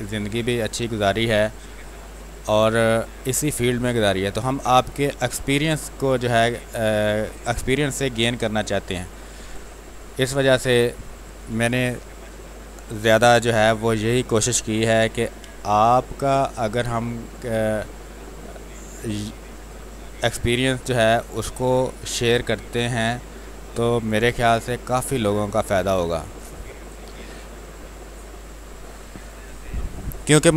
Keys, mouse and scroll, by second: 0.0-2.5 drag, 2.5 space, 2.7 click, 3.0 space, 3.8-7.5 drag, 7.5 space, 7.8 click, 8.0 space, 9.3 r, 9.4 click, 11.3 b, 11.6 space, 11.8 click, 12.1 space, 13.3 r, 13.5-15.1 drag, 15.1 b, 15.4 space, 15.5 click, 15.9 space, 16.8-25.9 drag, 25.9 space, 26.2 click, 26.4 space, 26.9 alt+click, 29.1 r, 29.3 click, 29.6 click.